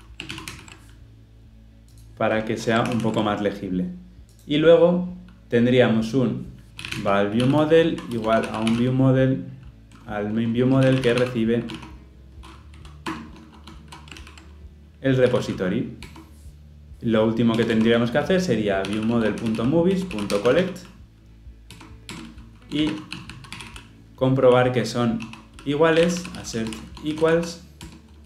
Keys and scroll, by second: 0.3 ctrl+alt+l, 0.5 ctrl+alt+o, 2.8 ctrl+alt+l, 3.0 ctrl+alt+o, 13.1 Return, 15.5 ctrl+p, 19.9 Return, 27.9 Return.